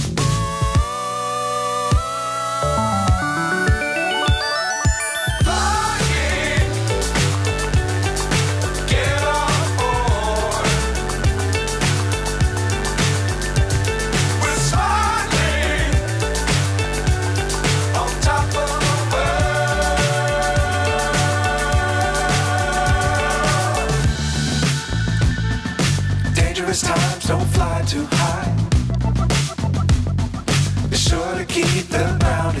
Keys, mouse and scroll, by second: 0.2 F4, 5.5 click, 5.5 scroll up 2, 6.6 s, 7.6 g, 8.4 g, 10.5 s, 11.2 g, 12.2 r, 14.5 click, 15.1 click, 15.5 r, 18.1 click, 18.8 g, 20.6 click, 21.4-23.8 drag, 25.3 click, 27.4-28.9 drag, 29.8 click, 31.1-31.9 drag, 31.9-32.5 scroll down 1, 32.5 shift+a.